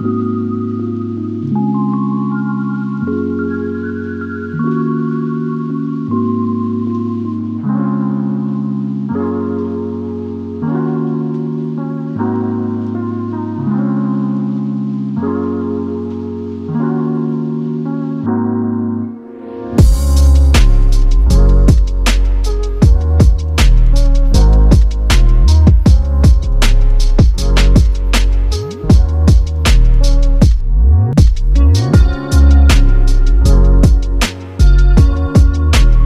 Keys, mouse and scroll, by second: 0.0-0.5 typing, 0.8-1.6 scroll down 36, 1.6-2.4 scroll up 11, 2.4-3.6 scroll up 11, 4.1 scroll down 10, 4.3 p, 4.8 middle click, 5.5 scroll down 7, 5.7-6.4 scroll up 7, 6.4 double click, 7.4-9.5 typing, 8.1-8.4 scroll up 7, 10.1-10.4 scroll down 14, 10.4 middle click, 10.8-12.3 scroll up 12, 13.5-14.1 scroll down 17, 13.6 space, 14.2 middle click, 14.6 middle click, 15.1 scroll down 5, 15.3 middle click, 16.4 Delete, 16.6 scroll down 2, 16.7 middle click, 17.0-17.3 scroll up 11, 17.3 space, 17.7 double click, 18.6 p, 19.0 scroll down 10, 20.1 middle click, 21.3 middle click, 21.7 scroll down 10, 22.0 middle click, 22.7 space, 23.5 right click, 27.2 m, 27.3-28.4 scroll up 5, 28.8 scroll down 3, 28.9-29.4 scroll up 20, 29.4 m, 29.6 double click, 29.7 middle click, 30.1 scroll up 2, 30.4 double click, 30.5 double click, 30.6 right click, 31.6 t, 33.5 typing, 33.6 Return, 34.1-34.7 scroll down 21, 34.7-36.0 scroll up 27.